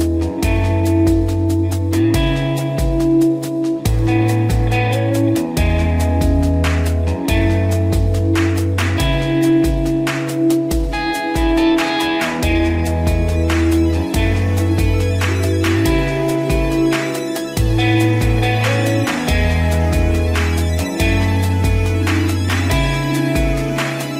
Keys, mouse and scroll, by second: 0.2 ctrl+=, 0.4-1.4 scroll down 1, 1.4-3.8 scroll up 1, 3.8-4.4 scroll down 1, 6.9 scroll down 1, 7.3 ctrl+-, 9.7 click, 19.2 click, 23.0 ctrl+g.